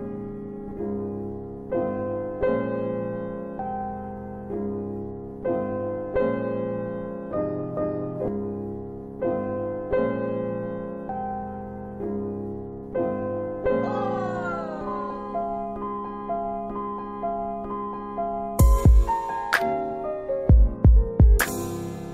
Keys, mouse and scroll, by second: 0.8 alt+w, 1.4 alt+middle click, 2.4 click, 4.4 typing, 5.7 click, 6.9 click, 9.6 click, 11.7 alt+middle click, 13.6 click, 14.4 alt+middle click, 16.0-16.6 scroll down 3, 17.0 alt+middle click, 18.8 alt+w, 20.1 alt+w, 20.5 middle click.